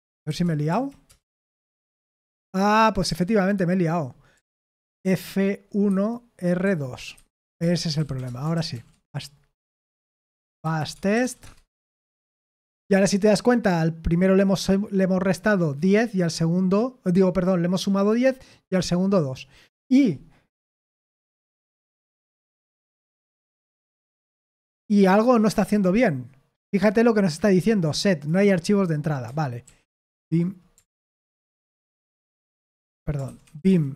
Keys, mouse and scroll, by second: 0.0-0.7 typing, 1.0 Return, 3.0-8.6 typing, 8.7 ctrl+p, 9.6 ctrl+p, 10.1 ctrl+c, 10.1-11.7 typing, 11.7 Return, 22.4 ctrl+p, 29.6 ctrl+p, 29.9 ctrl+p, 30.9 ctrl+p, 31.5 ctrl+p, 31.9 ctrl+p, 33.2 ctrl+c, 33.3-33.9 typing.